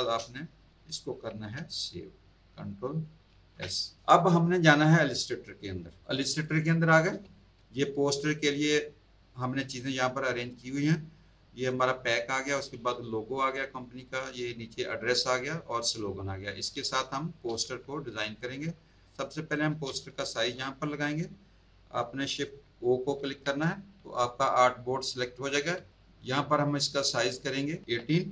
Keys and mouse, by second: 3.3 ctrl+s, 6.0 click, 7.2 space, 7.3 click, 11.2 click, 12.6 click, 16.8 space, 17.0 click, 18.1 z, 18.3 alt+click, 19.2 click, 23.1 shift+o, 25.7 space, 26.9 click, 28.0 KP_1.